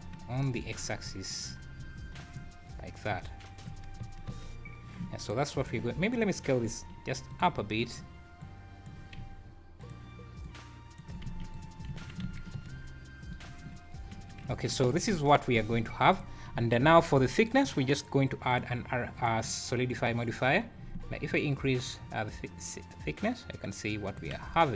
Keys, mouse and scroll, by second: 0.8 scroll up 4, 1.1-4.3 typing, 1.6 scroll down 1, 2.1 scroll down 6, 5.3 shift+right click, 6.1 click, 6.6 s, 8.4 click, 9.2 s, 10.4 click, 11.2 ctrl+a, 11.9 `, 12.2 alt+a, 12.5 space, 12.7 scroll up 4, 13.5 Escape, 14.5 `, 14.8 `, 15.1 space, 15.7 Escape, 16.1 click, 16.5 `, 16.9 scroll up 4, 17.6 scroll down 5, 18.5 click, 19.2 click, 21.3 shift+click, 24.5 scroll up 3.